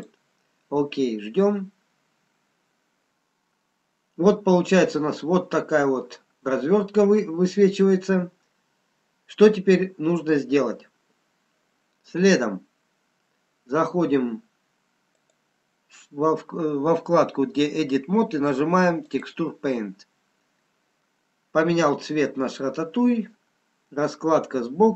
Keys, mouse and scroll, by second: 4.2-4.6 scroll up 1, 5.0-5.7 scroll down 1, 15.2 click, 22.2 middle click.